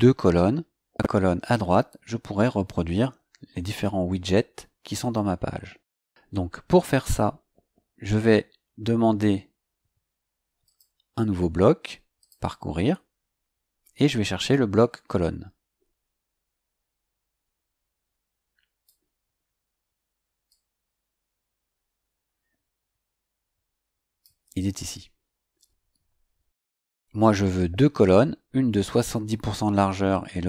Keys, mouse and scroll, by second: 2.2 scroll down 2, 4.5 scroll up 2, 5.0 scroll up 2, 7.3-10.6 scroll up 2, 10.6 click, 12.2 click, 14.3 click, 20.5-24.4 drag, 25.6 click.